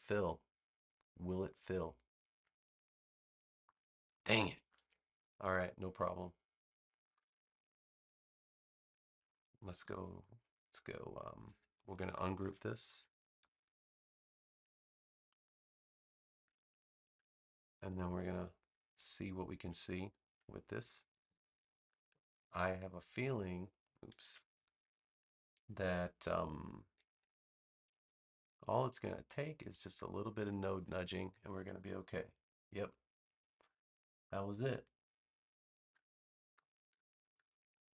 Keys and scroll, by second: 4.7 super+z, 9.7 a, 12.3 shift+super+g, 21.0 super+=, 22.5 space, 24.1 super+z, 37.0 space.